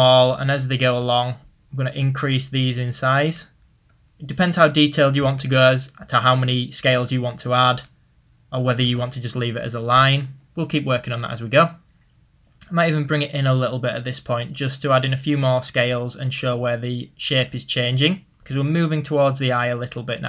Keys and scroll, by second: 12.3 ctrl+z.